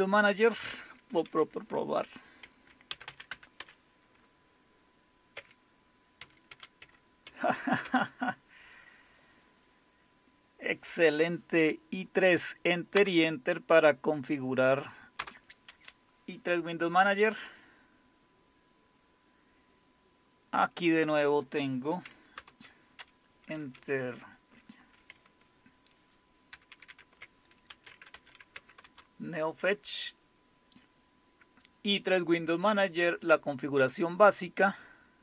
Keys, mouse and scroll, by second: 0.0 click, 2.7-3.8 typing, 5.4-7.7 typing, 7.8 Return, 15.2 Return, 17.3 click, 22.4 super+Return, 26.5 ctrl++, 26.7 ctrl++, 26.9 ctrl++, 27.5-28.6 typing, 28.8 Return.